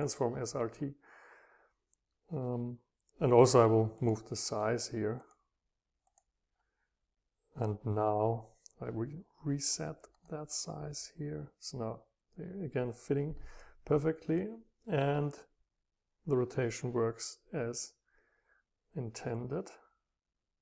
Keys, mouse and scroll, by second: 0.0-2.1 drag, 4.5 middle click, 5.2-7.4 drag, 13.5-15.2 drag, 15.6 click, 15.8 scroll down 2, 16.2-17.8 scroll up 4, 19.5-19.9 scroll up 2, 20.2-20.6 scroll down 2.